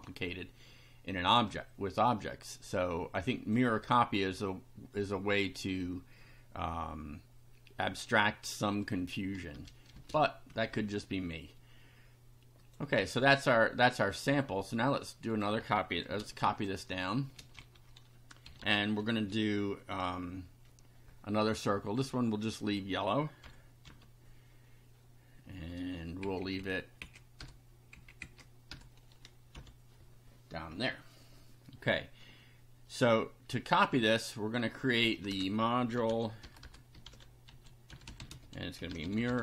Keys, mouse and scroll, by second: 3.3 click, 9.5 BackSpace, 9.9 space, 10.5 Down, 10.7 Left, 12.6 click, 14.9 click, 16.1 ctrl+c, 16.5 ctrl+click, 17.4 ctrl+v, 17.7 ctrl+Home, 18.2-19.1 typing, 22.0 click, 23.4 Delete, 23.8 F5, 26.2 Left, 27.4 BackSpace, 28.0 Left, 28.7 BackSpace, 29.5 F5, 34.0 click, 35.1 Return, 35.7-39.4 typing.